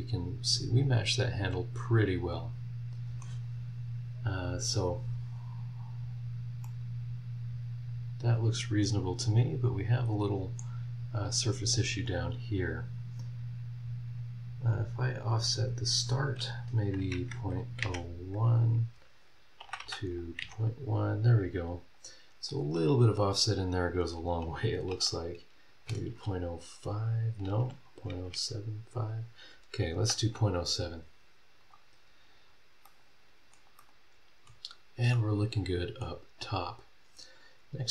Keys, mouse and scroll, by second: 6.3-6.8 scroll up 4, 6.6 middle click, 6.8-10.8 right drag, 10.8-11.1 scroll up 1, 11.3 scroll down 1, 15.5 click, 17.1 KP_Decimal, 17.3 KP_0, 17.8 KP_1, 19.6 BackSpace, 24.9 BackSpace, 25.8 KP_0, 26.1 KP_5, 27.5 BackSpace, 28.1 KP_7, 28.3 KP_5, 31.6 click, 32.4 scroll down 1, 32.8 middle click, 33.0 click, 33.8 middle click, 33.9 click, 35.1 middle click, 35.2 click, 36.0 scroll up 1, 36.6-37.0 scroll down 2, 37.1 scroll up 2, 37.7 scroll down 2.